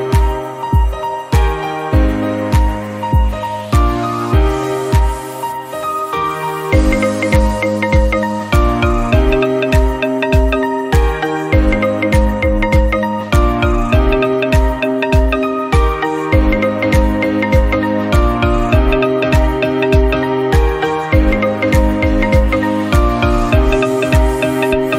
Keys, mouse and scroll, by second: 0.0 shift+middle click, 0.3 click, 0.9 click, 2.4 scroll down 3, 2.6-2.9 scroll up 2, 2.9 click, 3.1 g, 3.5 click, 5.8 middle click, 6.2 click, 7.1 click, 7.4 middle click, 7.9-8.2 scroll up 1, 8.4 click, 9.9 scroll down 2, 10.0 middle click, 10.5 KP_Decimal, 10.7-11.4 scroll down 18, 11.6-12.8 drag, 12.8 scroll down 1, 12.9 shift+middle click, 13.6 click, 14.0 Tab, 14.1-14.4 scroll down 3, 14.2 click, 14.4 middle click, 14.8-15.4 scroll up 3, 15.4 scroll up 5, 15.4 Tab, 15.8 click, 16.1 scroll down 1, 16.3 click, 16.6 shift+middle click, 16.8 scroll up 2, 17.1 middle click, 17.3 scroll down 2, 17.5 Tab, 17.8-19.1 drag, 19.3-20.5 drag, 20.5-20.9 scroll up 2, 20.9 Tab, 21.1 middle click, 21.3 scroll up 1, 21.6-22.0 scroll down 2, 22.1 shift+middle click, 23.1 scroll up 1, 23.3 shift+middle click, 23.7 3, 23.8 click, 24.3 i.